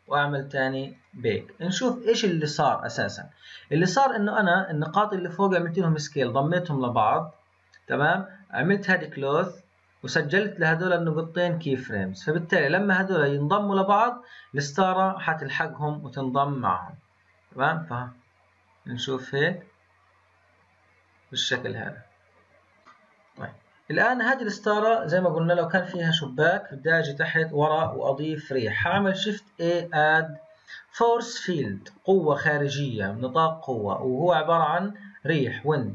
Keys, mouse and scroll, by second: 0.9-12.9 drag, 16.5-19.5 drag, 21.8-22.7 scroll up 3, 22.7 click, 22.8-23.8 middle drag, 23.8-24.7 scroll up 2, 24.7-26.6 middle drag, 26.6 click, 28.8 shift+a.